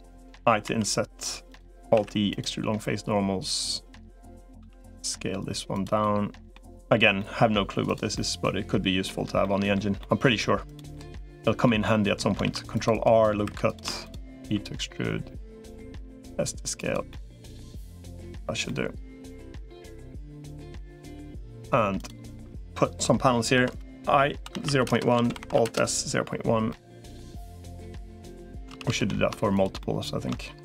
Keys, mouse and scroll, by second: 0.4 i, 1.8 alt+e, 4.4 s, 5.8 middle click, 6.5 middle click, 7.0 middle click, 7.6 click, 7.9 middle click, 9.2 middle click, 9.8 middle click, 10.7 middle click, 11.7 middle click, 12.2 ctrl+r, 13.4 3, 14.2 e, 15.8 s, 16.9 middle click, 17.6 click, 18.4 middle click, 20.1 middle click, 21.2 middle click, 21.8 click, 23.4 i, 25.0 alt+s, 26.5 middle click, 28.6 ctrl+z, 28.8 ctrl+z, 29.6 middle click, 30.4 shift+click.